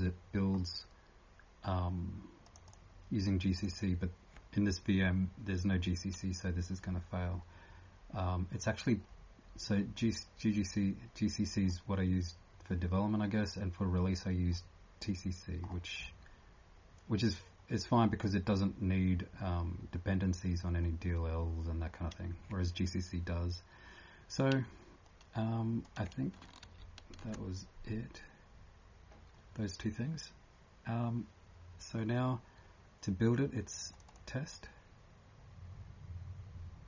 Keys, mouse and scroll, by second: 0.5 scroll up 1, 2.4 click, 2.4 scroll up 3, 8.1-9.0 scroll down 3, 9.0-9.4 scroll up 2, 11.7 scroll down 1, 13.9 scroll down 1, 14.7 scroll, 15.6 scroll down 8, 16.2 scroll, 18.2 scroll down 1, 18.2 9, 26.6 ctrl+s, 28.0-28.3 scroll down 2, 30.2 scroll down 1, 33.9 click, 34.1 click.